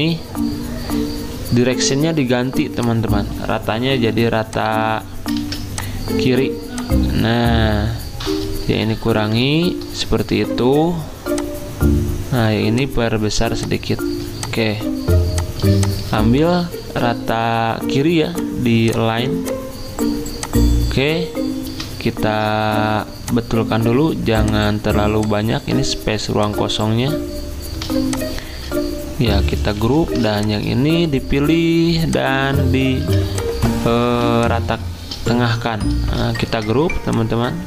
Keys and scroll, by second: 5.4 ctrl+z, 8.8 alt+Up, 8.9 alt+Up, 9.4 alt+Down, 29.8 ctrl+g, 33.0 z, 34.3 v.